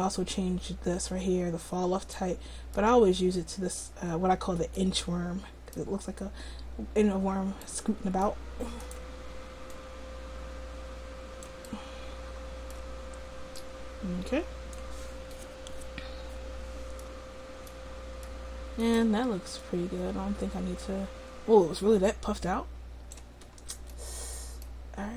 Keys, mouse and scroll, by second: 4.9-7.1 middle drag, 7.7 middle click, 8.8 right click, 9.8 middle click, 10.6 click, 11.8-13.6 middle drag, 13.6-15.4 drag, 15.4 middle click, 18.9 right click, 19.6-20.8 middle drag, 20.8 click, 23.6-25.1 middle drag.